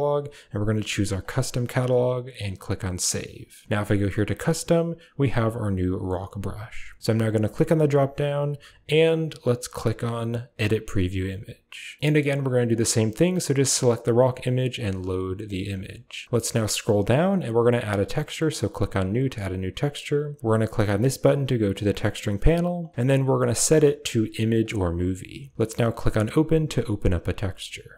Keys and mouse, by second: 2.0 typing, 4.2 click, 7.3-12.0 drag, 12.5 click, 14.6 click, 18.4 click, 21.7 click, 23.5 click.